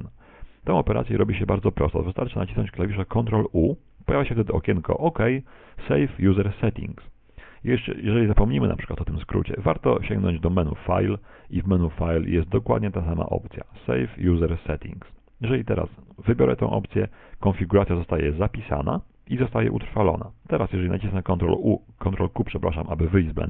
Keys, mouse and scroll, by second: 3.3 ctrl+u, 10.9 click, 21.7 ctrl+q.